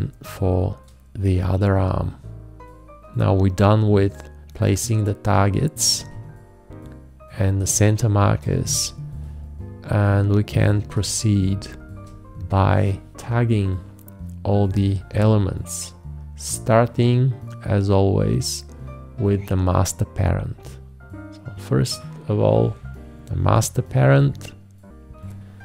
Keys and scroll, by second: 7.7 ctrl+a, 8.6 ctrl+space.